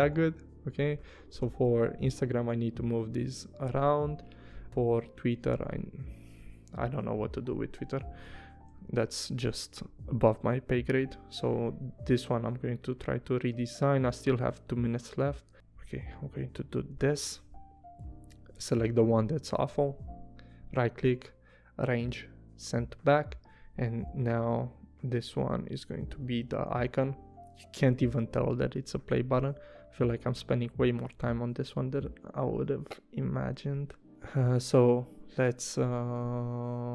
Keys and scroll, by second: 0.2 v, 4.9 a, 8.3 v, 8.9 a, 11.1 p, 16.9 v, 18.8 BackSpace, 26.1 i, 26.7 v, 27.9 p, 32.5 super+z.